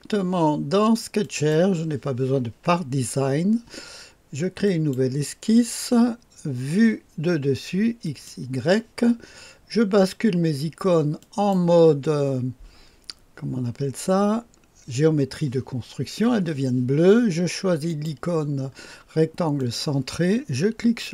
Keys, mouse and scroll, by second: 1.2 click, 4.6 click, 8.0 click, 11.2 click, 17.8 click, 19.6 click.